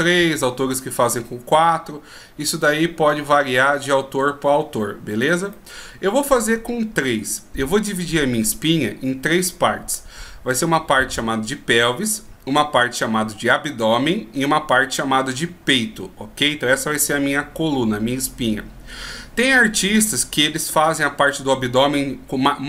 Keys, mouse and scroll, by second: 5.7 middle click.